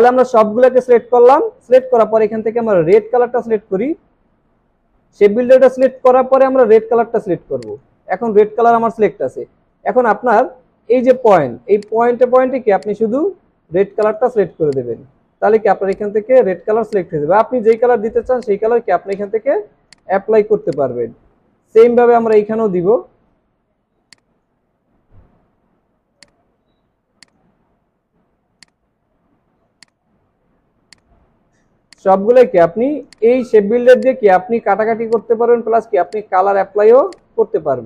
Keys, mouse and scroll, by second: 4.4 ctrl+z, 10.4 alt+scroll up 1, 13.2 scroll down 1, 14.4 alt+scroll down 1, 14.6 space, 21.5 alt+scroll up 1, 23.7 alt+scroll down 1, 24.0 space.